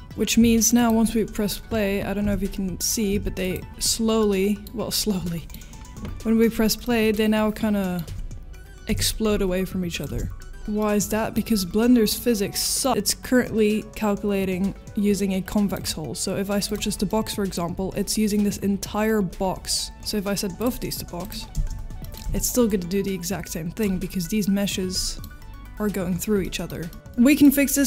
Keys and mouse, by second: 0.0 space, 3.4 click, 3.4 space, 4.2-4.6 middle drag, 5.2 middle click, 6.8 middle drag, 7.8 middle click, 8.0 space, 10.8 middle click, 11.7 middle click, 15.7-16.8 drag, 17.1 middle click, 20.6 click, 21.5 space, 22.0 middle drag, 22.6 drag, 25.0 middle click, 26.4 middle drag, 26.9 middle drag, 26.9 space, 27.1-27.4 middle drag.